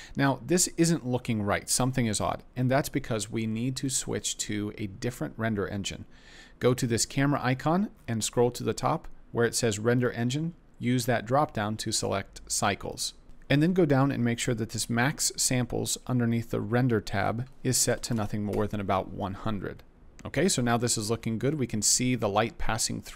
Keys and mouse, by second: 3.5 middle click, 7.0 click, 9.9-13.2 drag, 13.2 KP_0, 17.2-18.5 drag, 18.1 KP_0.